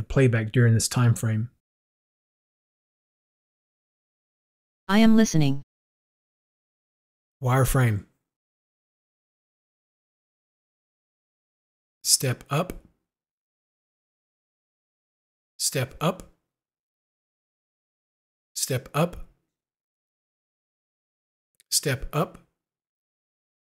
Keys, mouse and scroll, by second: 13.4 u, 17.0 u, 20.0 u.